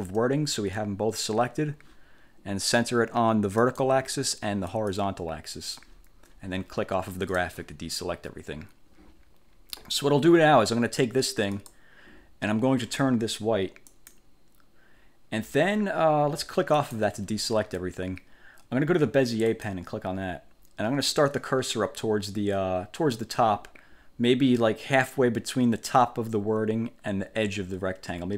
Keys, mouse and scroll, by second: 3.7 click, 4.8 click, 7.4 click, 11.7 click, 14.0 click, 16.9 click, 19.6 click.